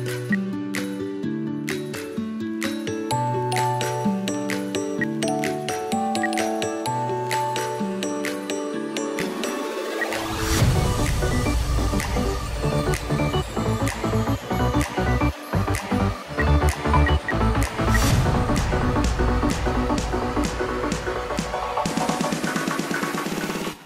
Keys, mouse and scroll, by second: 0.1 F2, 4.8 Delete, 6.0 Delete, 9.8 space, 10.4 right click, 16.2 space, 16.9 ctrl+Page_Down, 17.7 ctrl+Page_Up, 20.0-21.8 scroll down 1.